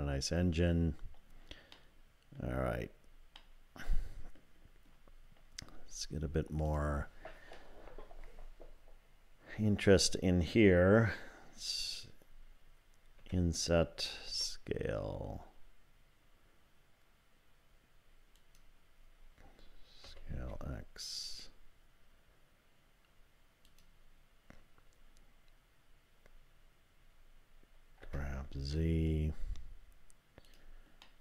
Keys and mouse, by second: 1.7 middle click, 3.4-4.4 middle drag, 6.7 click, 13.2 i, 14.3 s, 20.1 s, 28.0 g, 31.1-31.2 middle drag.